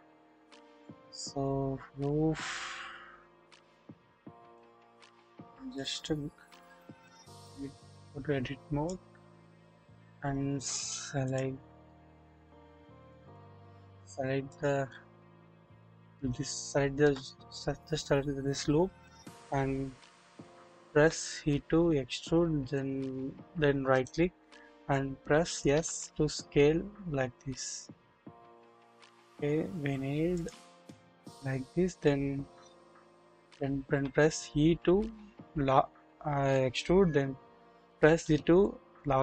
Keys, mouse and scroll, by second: 1.3-1.6 scroll up 1, 2.5-3.7 scroll down 1, 3.7 click, 5.6-7.0 middle drag, 7.0 click, 8.1 click, 10.0-11.1 scroll down 1, 11.8 alt+click, 13.0 click, 13.3 double click, 14.4 alt+click, 16.1 scroll up 1, 16.4 shift+middle click, 20.9 typing, 24.0 right click, 25.7 s, 33.8 e, 33.9 e.